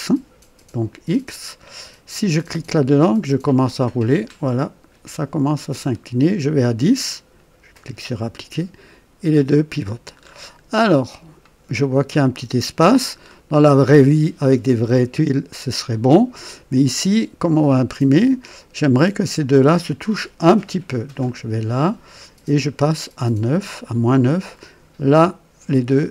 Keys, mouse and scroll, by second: 2.2 click, 3.0-3.6 scroll down 1, 4.0-5.5 scroll down 4, 7.7 click, 10.1-10.7 scroll up 2, 10.9-11.5 right drag, 11.8-12.1 scroll up 1, 13.2-13.6 scroll down 1, 14.8-15.2 scroll up 1, 15.5-15.8 scroll down 1, 21.2 click, 22.2 scroll up 1, 24.1 click.